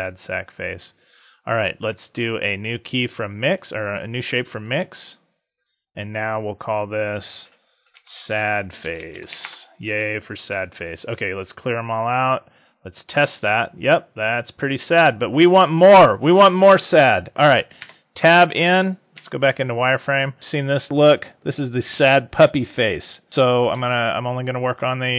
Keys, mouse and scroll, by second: 1.9 click, 6.7 click, 11.8 click, 13.0 click, 17.7 Tab, 19.1 z, 20.3 l.